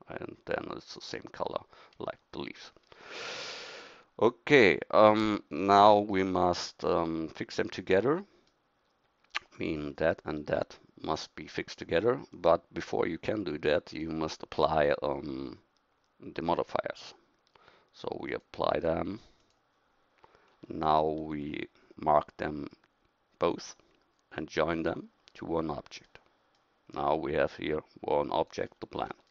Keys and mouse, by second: 20.8-23.6 middle drag, 26.2 middle click.